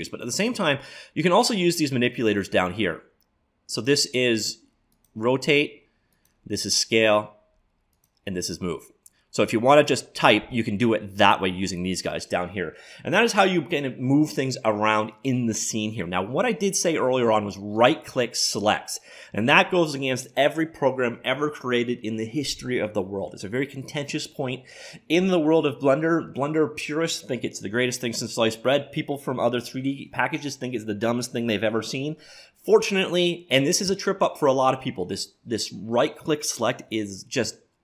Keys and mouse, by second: 3.7-9.8 drag, 17.8-19.8 right drag.